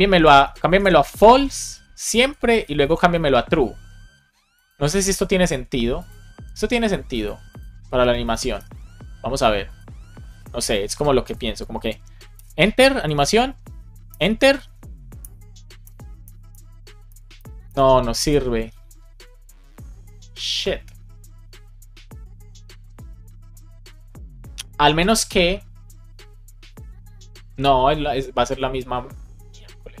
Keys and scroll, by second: 0.0 super+Right, 0.3 shift+super+Left, 0.5 super+c, 0.7 Up, 1.0 super+Right, 1.2 Return, 1.5 super+v, 1.8 Left, 3.1 super+s, 4.8 space, 5.4 super+s, 7.9 Return, 8.2 shift+super+Left, 8.4 BackSpace, 8.6 super+s, 12.2 Return, 14.0 Return, 15.2 Return, 15.9 Return, 16.4 Return, 16.9 Return, 17.5 Return.